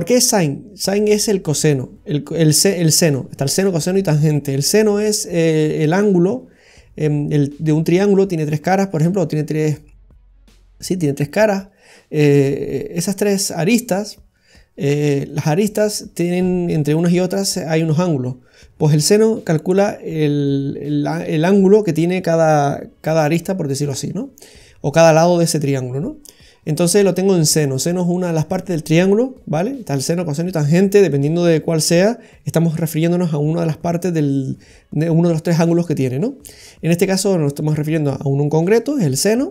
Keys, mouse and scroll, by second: 0.1-0.5 scroll down 3, 26.2-27.8 scroll up 4, 39.0-39.5 scroll down 2.